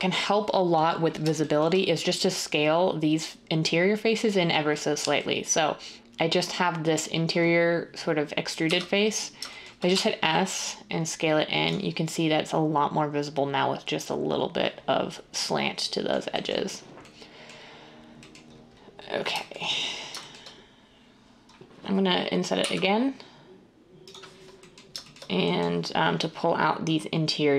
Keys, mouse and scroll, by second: 8.6 1, 9.9 s.